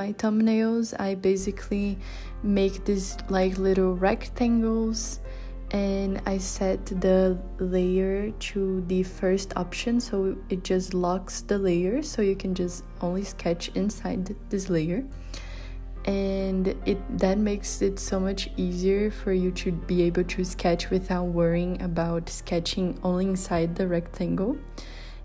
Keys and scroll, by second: 10.7 z, 13.5 h, 16.8 z.